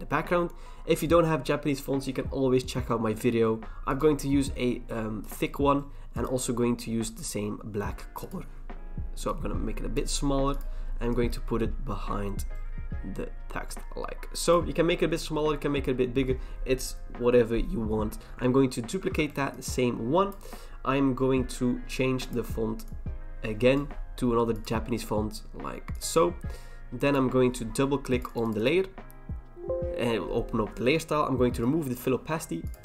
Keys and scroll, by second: 18.9 ctrl+j.